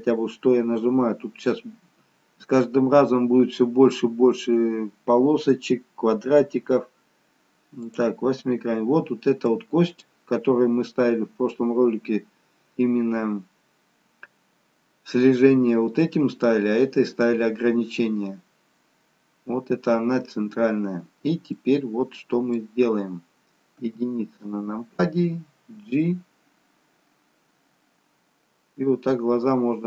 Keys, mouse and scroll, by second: 9.2-9.6 scroll up 1, 9.6 middle click, 11.4-11.9 scroll up 1, 18.5-19.0 scroll down 1, 19.1-19.5 scroll up 1, 21.7 middle click, 24.1 KP_1, 25.9 g.